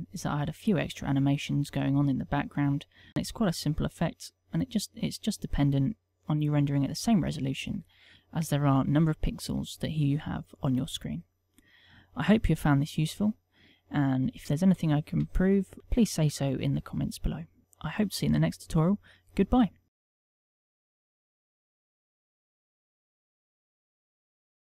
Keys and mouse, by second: 5.4 click.